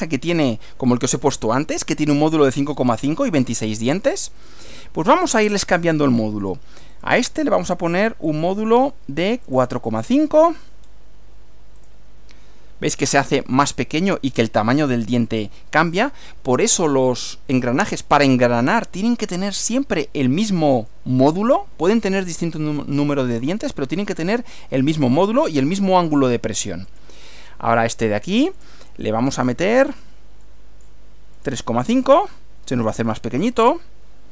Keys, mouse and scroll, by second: 1.1-2.3 shift+middle drag, 4.3 click, 6.1 click, 6.9 click, 8.3 click, 9.5 click, 10.0 scroll down 1, 10.8 scroll up 1, 11.8 click, 13.9-15.1 middle drag, 19.7-21.1 middle drag, 26.9 click, 28.7 click, 29.3 click, 30.4 click, 31.3 click, 31.9-32.5 scroll down 3, 33.1 click.